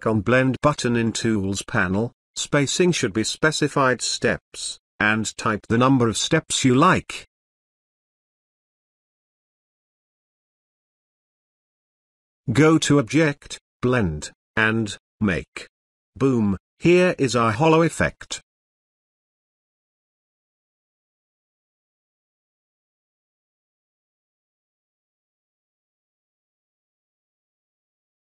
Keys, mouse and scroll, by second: 2.1 click, 6.8-8.1 drag, 12.0 click, 14.6 click, 18.1-18.8 scroll down 1, 18.8-20.3 scroll up 1, 22.3 ctrl+z, 23.3-27.2 drag.